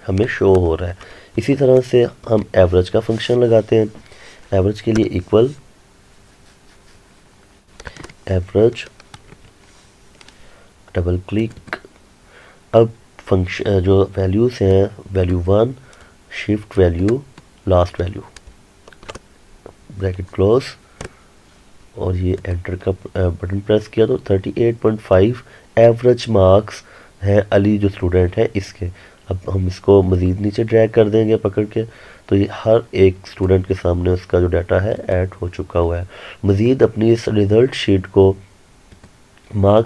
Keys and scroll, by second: 21.1 Return.